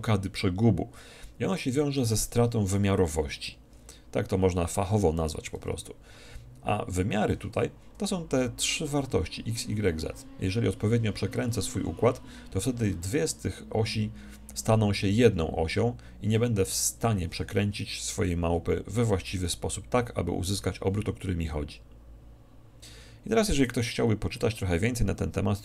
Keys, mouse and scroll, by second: 19.2 alt+r.